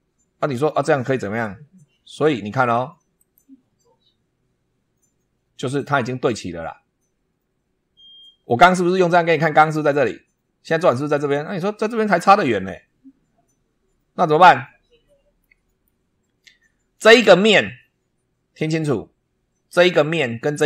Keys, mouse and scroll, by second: 3.1 click, 4.2-4.7 scroll up 1, 8.3 scroll down 1, 11.5-12.2 middle drag, 15.3-15.9 middle drag, 16.0 scroll up 1, 18.7 scroll up 1.